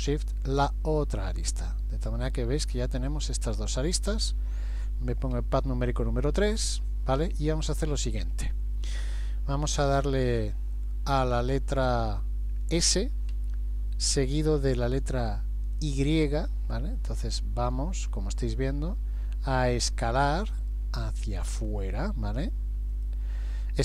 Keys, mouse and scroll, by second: 0.7 shift+click, 1.7 middle click, 5.4 KP_3, 13.3 s.